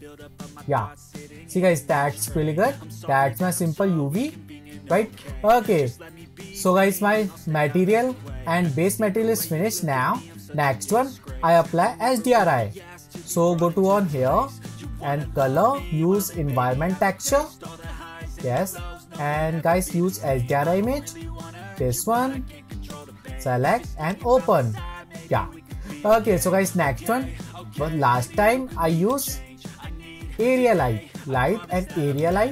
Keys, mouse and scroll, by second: 0.0 click, 1.1-2.2 scroll down 3, 2.2-4.0 shift+middle drag, 4.0-5.2 scroll up 2, 5.2-7.9 shift+middle drag, 7.9-9.0 scroll up 3, 17.7-18.7 drag, 18.8-24.6 drag.